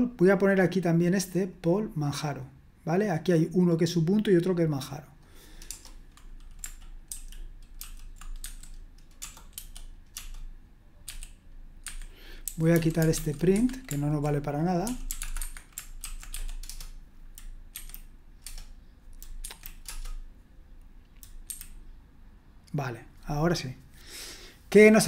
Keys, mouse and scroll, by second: 1.5-7.1 drag, 5.7 Return, 7.1 shift+-, 7.8 shift+;, 8.4 q, 9.5 e, 11.0 w, 11.8 Escape, 12.4-13.6 typing, 14.8-16.7 typing, 17.7 F5, 18.4 Return, 19.4 F5, 19.8 Return, 21.4 F5.